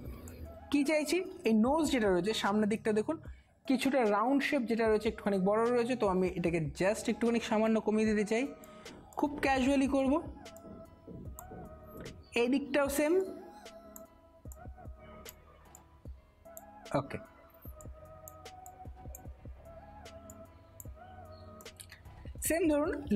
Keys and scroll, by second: 21.3 space.